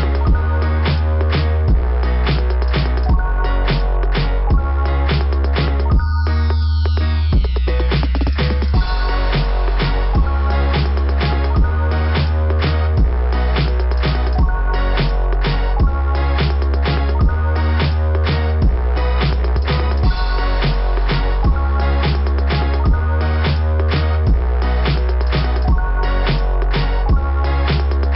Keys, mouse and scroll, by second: 7.8 click, 7.9 click, 9.1 scroll up 2, 11.7 right click, 13.4 click, 15.4 click, 19.0 right click, 20.8 click, 23.3-23.7 scroll up 2, 24.1-24.6 scroll up 2, 25.2 scroll up 1, 25.5 scroll down 1, 25.9 scroll up 1, 26.0 scroll down 2, 27.2 scroll down 1, 28.0 scroll down 1, 28.1 scroll up 2.